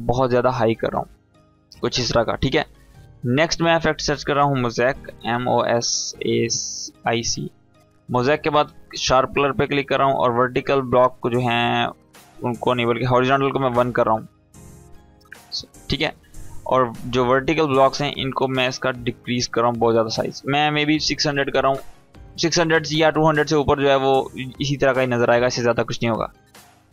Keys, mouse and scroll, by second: 1.1-3.0 scroll up 1, 3.7-4.3 click, 4.2-5.8 typing, 6.3-6.9 drag, 12.1 click, 13.9 Tab, 14.7 shift+Tab, 16.6-18.9 drag, 23.6-24.6 scroll down 1, 24.6-26.3 scroll up 1, 26.4-26.9 drag.